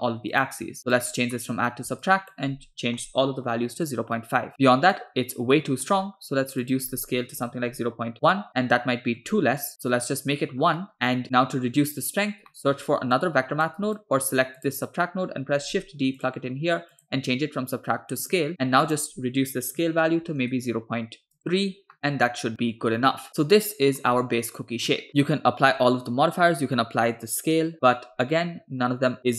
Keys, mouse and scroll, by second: 0.3-1.1 drag, 1.3 middle click, 1.7 scroll up 1, 2.1-3.9 shift+drag, 5.0-6.0 middle drag, 6.7-8.2 drag, 8.5-9.2 middle drag, 9.7 click, 10.6 scroll down 2, 10.8-12.0 middle drag, 12.3 scroll up 1, 12.5 middle click, 13.2 click, 14.0 click, 14.6 drag, 15.7 shift+d, 16.9-18.4 drag, 18.5-18.9 scroll up 2, 18.9-20.5 drag, 21.4 click, 22.0-24.0 middle drag, 25.1-26.6 scroll down 3.